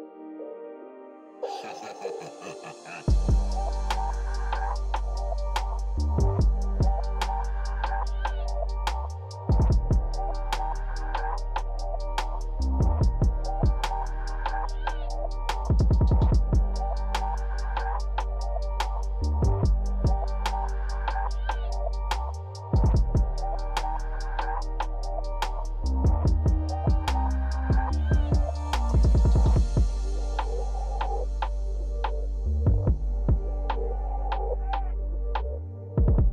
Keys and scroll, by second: 14.7 f, 15.4 f, 18.9 l.